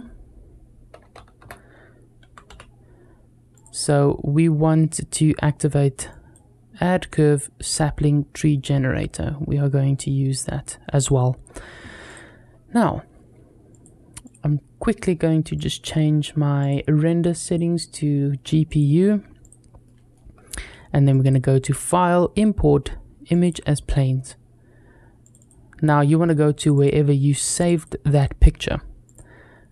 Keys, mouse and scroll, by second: 11.9 click, 13.5 click, 14.0-15.6 drag, 16.4-17.4 drag, 18.5 click, 19.2 click, 19.7 middle click, 20.9-23.4 drag.